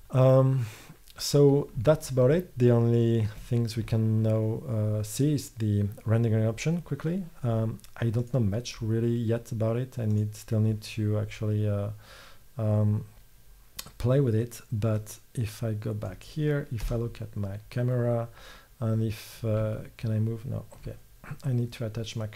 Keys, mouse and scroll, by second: 3.5 middle click, 4.3-6.3 drag, 8.3-12.2 drag, 15.1-16.9 drag, 16.9 KP_0.